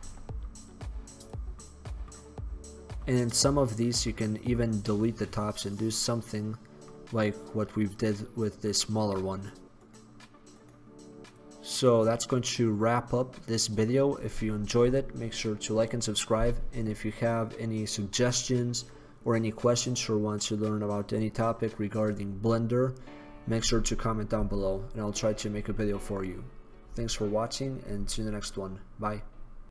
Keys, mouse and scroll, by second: 11.4 right click, 12.2-13.3 middle drag, 13.4 middle click, 13.7 middle drag, 14.1-29.7 middle drag.